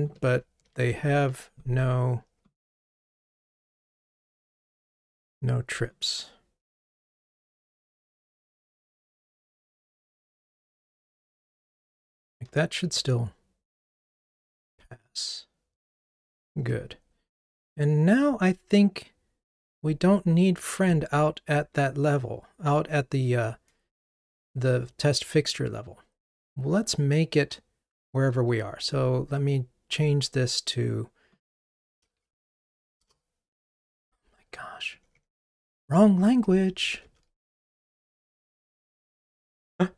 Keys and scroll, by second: 0.6 alt+Up, 14.6 ctrl+r, 38.5 ctrl+r.